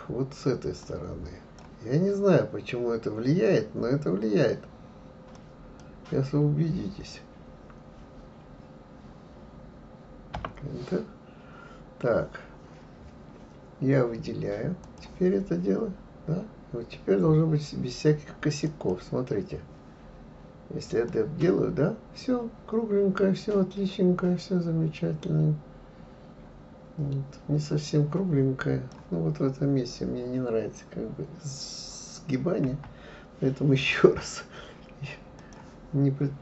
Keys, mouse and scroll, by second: 14.8-17.8 drag, 18.6 click, 21.1-24.1 drag, 32.7 Delete, 35.4-36.4 drag.